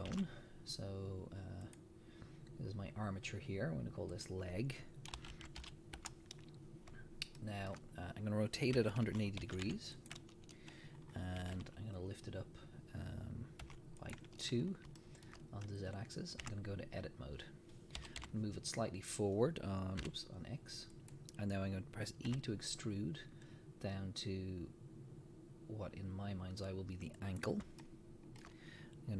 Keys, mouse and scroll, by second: 0.1 shift+a, 2.6 scroll up 1, 4.1-7.4 drag, 6.1 Return, 7.4-10.1 shift+middle drag, 8.9 r, 10.1 click, 11.0 scroll down 1, 11.4 g, 14.1 click, 14.6-15.0 scroll up 1, 15.0-17.1 shift+middle drag, 16.5 Tab, 18.0 g, 21.1 click, 22.3 e, 27.4 click, 27.8-29.1 shift+middle drag.